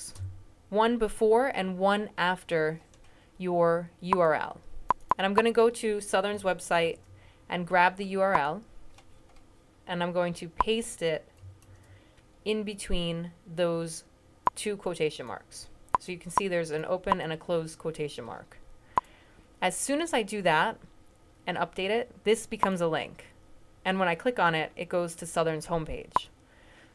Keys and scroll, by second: 6.6 super+c, 11.5 super+v.